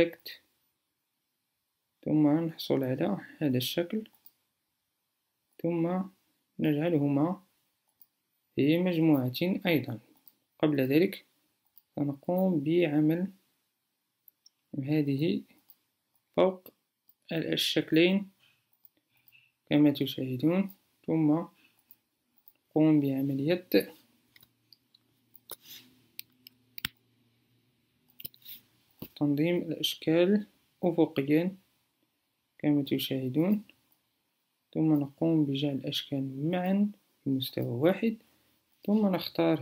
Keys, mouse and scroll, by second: 28.6-33.7 alt+drag.